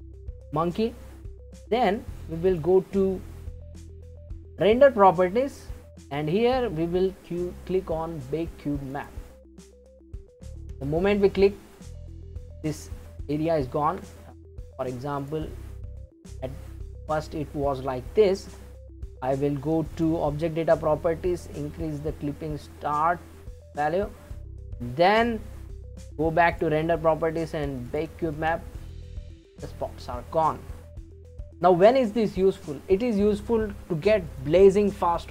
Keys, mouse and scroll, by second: 2.5 click, 8.9-9.9 drag, 9.9-13.0 middle drag, 13.5 ctrl+z, 15.2-16.6 drag, 16.6-19.6 middle drag, 19.9 click, 21.4-24.4 shift+drag, 26.5 click, 27.9-30.9 drag, 31.4-32.3 scroll down 1, 32.3-33.9 scroll down 1, 34.3-35.3 drag.